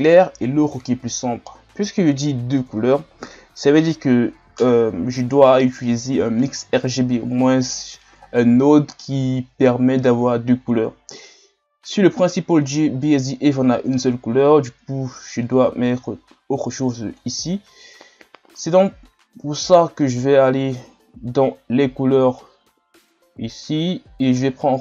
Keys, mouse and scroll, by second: 12.8 click, 17.2 click.